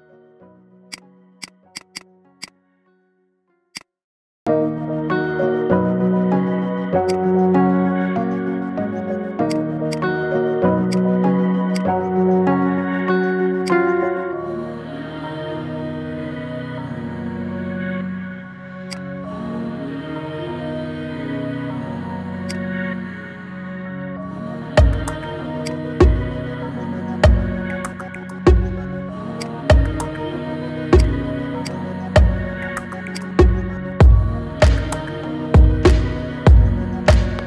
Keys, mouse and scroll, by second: 0.8 click, 1.5 alt+shift+click, 1.7 alt+shift+click, 2.2 alt+shift+click, 2.8 ctrl+b, 4.1-5.3 middle drag, 5.3 ctrl+b, 7.1 scroll down 4, 7.5 KP_1, 8.2 shift+middle click, 8.9 Tab, 9.0 scroll down 2, 9.3-10.7 right drag, 10.7 click, 11.2-11.5 scroll down 3, 11.5 click, 12.0-12.5 scroll up 3, 12.5-13.1 middle drag, 13.1-13.4 scroll up 3, 13.4 click, 13.8 shift+middle click, 14.4 KP_1, 14.7-15.2 scroll down 6, 15.4-16.0 scroll up 8, 16.0-17.5 middle drag, 17.5 KP_1, 18.4 shift+d, 19.4 KP_3, 20.2 g, 22.8 KP_1, 23.7 s, 25.7-26.4 scroll down 6, 26.4 scroll up 4, 26.6-27.6 middle drag, 27.6 KP_1, 28.4 s, 29.4-30.9 middle drag, 30.9 click, 31.0 scroll up 3, 31.4 click, 32.4 ctrl+2, 33.0 click, 34.0 ctrl+2, 34.3-35.0 middle drag, 35.0 Tab, 35.2 scroll up 3, 35.4 middle click, 36.0-37.4 scroll down 3.